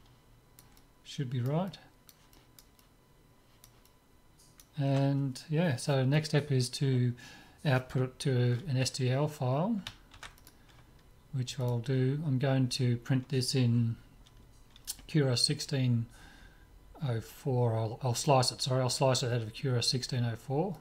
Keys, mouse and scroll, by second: 10.1 ctrl+s, 11.6-13.4 drag.